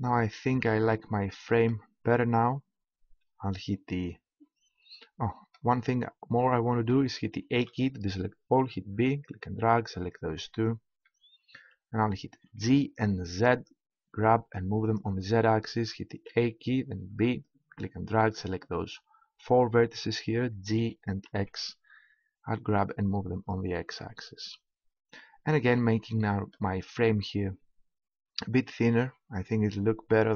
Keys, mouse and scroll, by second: 0.0-4.8 middle drag, 5.0-7.5 middle drag, 7.5 a, 8.5 b, 10.4 middle click, 10.7 middle click, 12.4 g, 14.9 click, 16.1 a, 16.9 b, 20.8 g, 23.4-25.4 drag, 25.9-28.9 middle drag, 28.9 Tab.